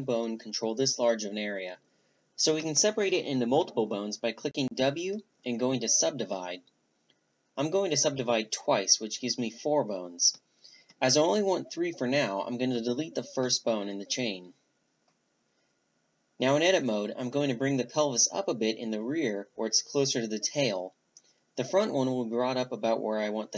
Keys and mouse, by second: 2.0 w, 3.8 w, 9.8 a, 10.0-12.2 drag, 11.5 Delete, 13.3-15.8 drag, 15.8-17.8 right drag, 19.5-21.8 drag.